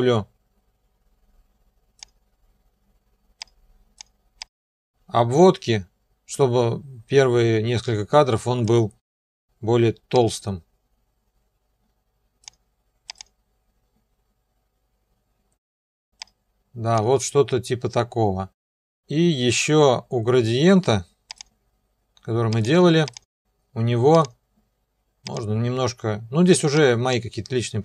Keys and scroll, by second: 9.1 ..